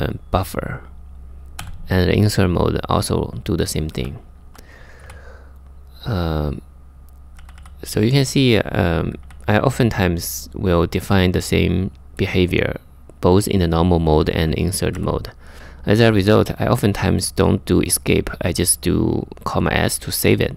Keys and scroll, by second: 1.2 j, 3.6 j, 4.1 j, 4.6 k, 7.0 k, 8.1 j, 8.8 k, 13.7 j, 14.6 k, 15.5 j.